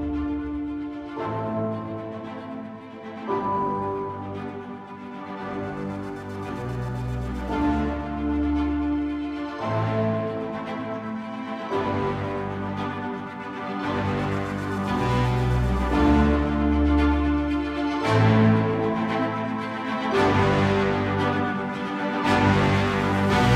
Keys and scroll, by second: 1.3 ctrl+z, 21.8 ctrl+i, 22.9 ctrl+i, 23.3 ctrl+=.